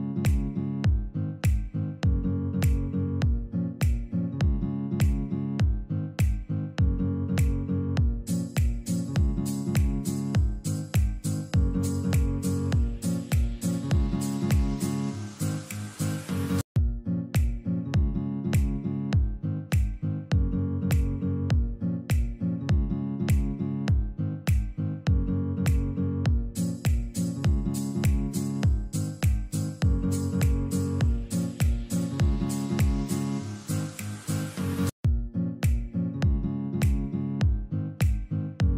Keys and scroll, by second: 2.9 alt+v, 5.1 ctrl+Page_Down, 6.5 ctrl+z, 7.7 Escape, 8.5 ctrl+z, 10.3 ctrl+Page_Down, 11.1 ctrl+z, 12.0 ctrl+z, 13.7 alt+v, 14.5 Escape, 16.9 shift+Page_Up, 17.4 alt+v, 18.6 Escape, 19.2 F3, 19.6 Escape, 24.8 ctrl+g, 28.1 ctrl+g, 29.9 ctrl+g, 30.5 c, 31.1 Escape, 31.9 alt+v, 33.4 alt+v, 34.1 Escape, 36.0 Escape.